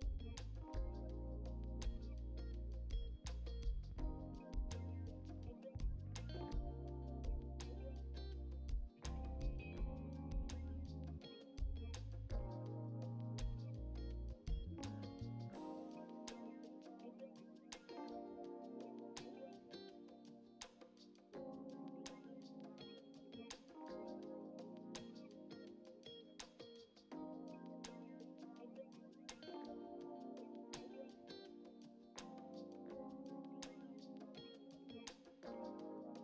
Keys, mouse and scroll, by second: 0.8 scroll up 3, 0.9 click, 1.3 click, 1.6 middle click, 1.8 scroll down 4, 2.0 middle click, 2.2-3.4 drag, 3.4 ctrl+z, 3.4 ctrl+z, 3.6 middle click, 3.7 scroll up 3, 4.0 shift+click, 4.1 shift+click, 4.6 click, 4.7 middle click, 4.9 ctrl+z, 5.1 middle click, 5.4 click, 5.5 scroll up 1, 5.6 shift+middle click, 6.1 scroll down 3, 6.2 shift+middle click, 7.1 click, 7.3 scroll down 2, 7.4 middle click, 7.5 ctrl+z, 8.3-9.3 shift+middle drag, 9.6 KP_1, 9.9 scroll up 2, 10.0 shift+middle click, 10.1 alt+z, 10.3 click, 11.0 scroll down 2, 11.1 shift+middle click, 11.5 h, 11.9-13.2 shift+middle drag, 13.2 alt+z, 13.4 scroll up 2, 13.4 shift+middle click, 13.8 click, 14.7-15.8 drag, 15.8 scroll down 2, 15.9-17.0 middle drag, 17.1 shift+middle click, 17.6 scroll up 1, 17.8 shift+middle click, 18.0 click, 18.1 scroll down 4, 18.2 shift+middle click, 18.9 alt+h, 19.0 click, 19.1 scroll down 1, 19.1 shift+middle click, 19.4 scroll up 2, 19.5 shift+middle click, 20.1 scroll down 1, 20.2 shift+middle click, 22.6 scroll up 2, 22.7 middle click, 23.6 click, 27.2 scroll down 3, 27.3 shift+middle click, 28.2 scroll up 3, 28.3-29.3 shift+middle drag, 29.3 scroll up 2, 29.4 shift+middle click, 29.7 ctrl+r, 32.0 ctrl+r, 33.1 scroll down 2, 33.2 middle click, 34.3 middle click, 34.6 scroll up 2, 34.7 middle click, 35.9 shift+middle click.